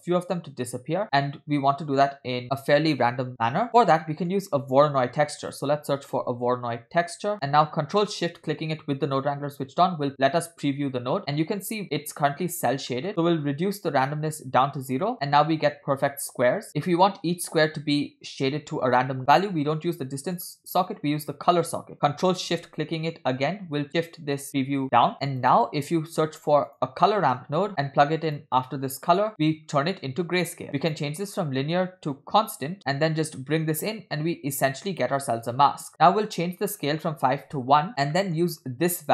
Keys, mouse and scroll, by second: 3.7 middle click, 3.7 scroll down 3, 4.1 middle click, 5.0 shift+a, 7.3 middle click, 8.4 ctrl+shift+drag, 11.2 middle click, 11.6-12.0 scroll up 2, 13.0 middle click, 13.1 scroll up 3, 13.5-14.7 drag, 15.1 middle click, 20.5 ctrl+shift+click, 25.2 middle click, 25.2 scroll down 2, 25.3 click, 26.1 shift+a, 28.9 click, 30.8-34.6 drag, 35.9 middle click, 35.9 scroll up 1, 36.6-37.8 drag, 38.0 scroll down 1, 38.2-38.5 middle drag, 38.5 scroll up 2.